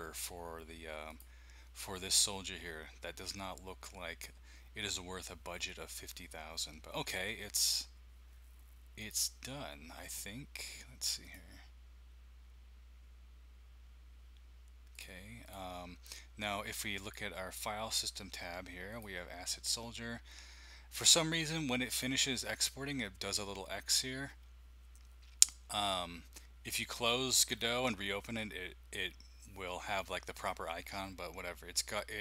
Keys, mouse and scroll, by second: 1.1 click, 9.0 click, 11.2 click, 14.9 click, 15.4 click, 17.0 click, 18.9 click, 21.9 click.